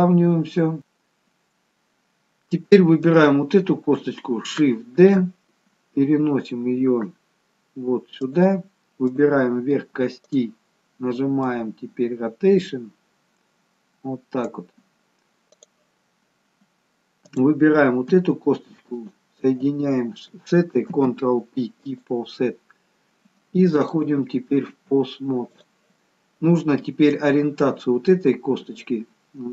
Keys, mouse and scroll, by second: 0.8 Delete, 3.2 click, 5.1 shift+d, 9.3 click, 10.4 click, 15.6 click, 17.5 click, 19.1 shift+click, 21.0 ctrl+p.